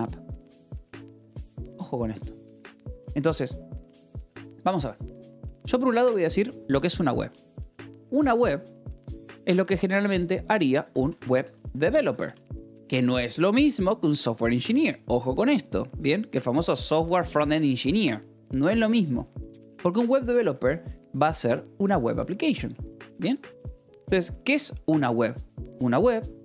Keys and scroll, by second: 5.7 b, 5.9 space, 7.0 BackSpace, 7.4 space, 10.4-12.3 typing, 20.8 space.